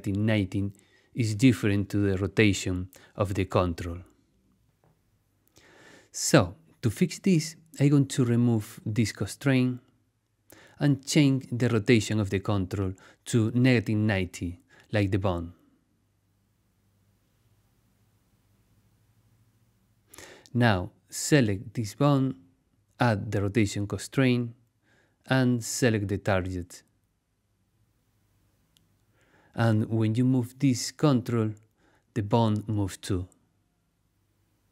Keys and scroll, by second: 16.7-17.9 typing, 18.6 Return, 30.7 v.